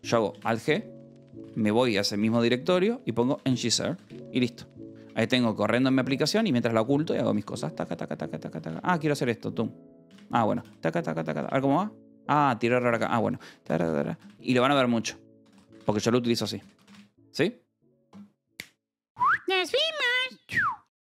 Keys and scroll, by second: 0.9 alt+g, 1.3 p, 2.1 Right, 2.2 Return, 3.0-4.4 typing, 6.8-9.0 typing, 9.1 alt+g, 10.4-11.7 typing, 11.9 alt+g, 13.1 k, 13.6 j, 15.2 ctrl+c, 15.5-17.2 typing, 15.8 Return.